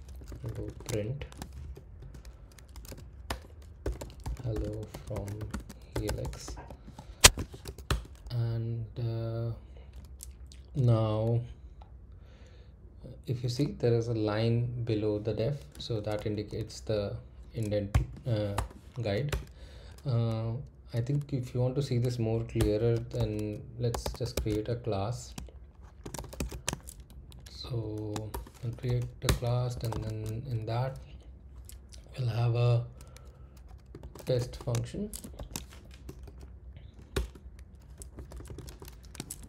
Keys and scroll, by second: 0.0-1.7 typing, 2.9-5.9 typing, 7.2-8.1 typing, 17.9 o, 18.5 BackSpace, 19.3 Return, 22.6 Return, 22.7-24.5 typing, 25.8-30.4 typing, 29.2 Return, 33.7-36.2 typing, 37.1 Return, 37.7-39.4 typing.